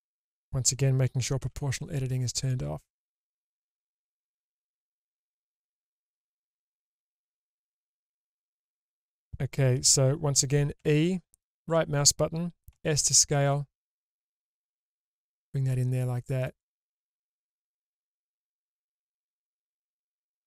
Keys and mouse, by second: 1.4 o, 2.5 click, 3.6 middle click, 4.4 alt+click, 5.7-8.0 middle drag, 10.8 e, 12.7 s, 16.9-18.6 middle drag, 19.5 middle click.